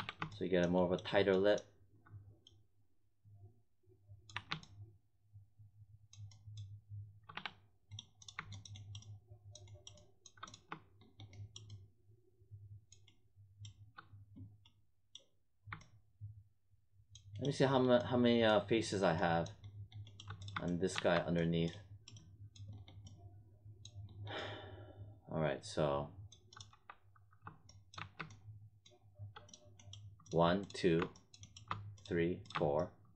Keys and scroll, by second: 4.3 1, 20.9 1, 26.6 1, 27.9 1.